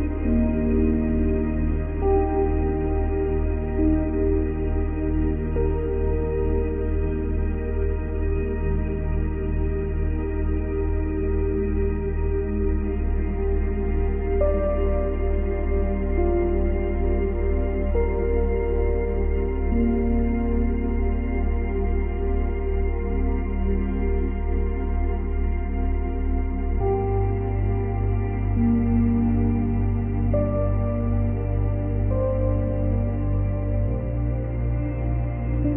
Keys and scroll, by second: 19.2 ctrl+z, 24.8 space, 30.7 space.